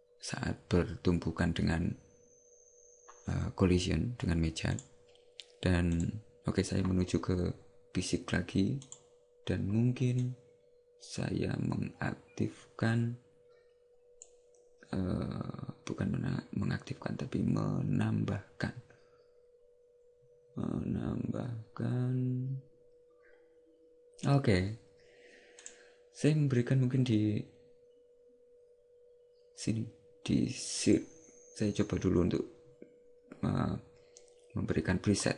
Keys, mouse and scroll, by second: 6.0 click, 8.9 click, 10.3 click, 25.7 click.